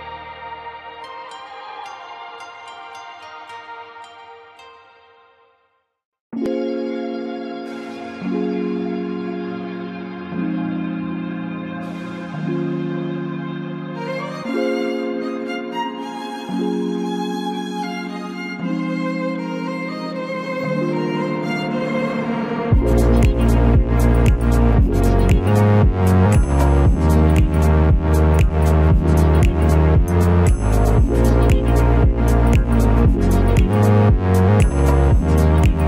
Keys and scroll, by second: 8.9 Escape.